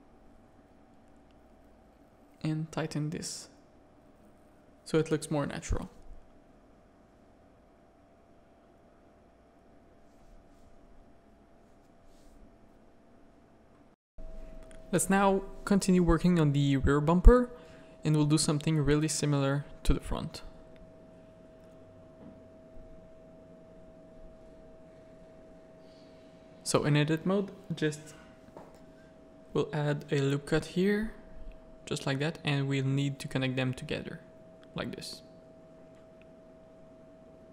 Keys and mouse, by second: 0.0 middle click, 0.7 ctrl+Tab, 0.8 ctrl+r, 2.3 Tab, 2.4-3.5 middle drag, 3.6 z, 5.8 middle click, 8.9 middle click, 11.2-13.0 middle drag, 13.6 middle click, 14.3-15.8 middle drag, 16.3-17.4 middle drag, 18.1 middle click, 18.4 middle click, 19.0 z, 19.5 shift+middle click, 20.0 Tab, 20.2 middle click, 20.5 z, 20.8 a, 21.2-23.1 middle drag, 23.4 shift+middle click, 24.0-25.9 middle drag, 28.3 middle click, 29.2 ctrl+r, 30.4 a, 31.4 2, 31.5 click, 32.4 shift+click, 32.9 f, 33.2 a, 33.7 1, 33.9 middle click, 34.3 a, 34.7-35.7 middle drag, 37.1-37.5 typing.